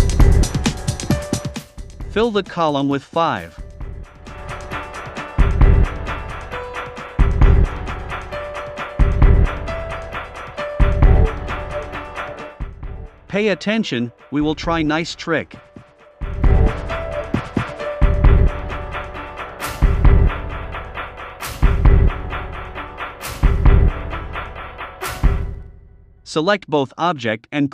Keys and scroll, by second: 13.4 super+c, 13.9 super+f, 14.6 shift+Down, 16.3 a, 19.1 a, 20.9 v, 23.7 shift+Up, 24.9 Down.